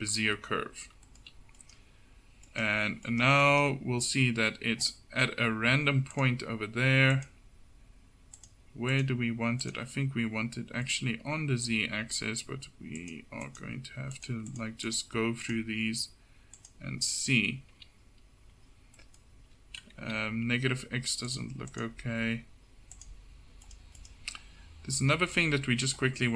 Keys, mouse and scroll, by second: 1.6-3.5 right drag, 3.5-10.4 drag, 11.3 middle click, 13.1-18.7 middle drag, 18.7 KP_7, 19.1-20.7 middle drag, 20.1 KP_7, 25.2-26.3 drag.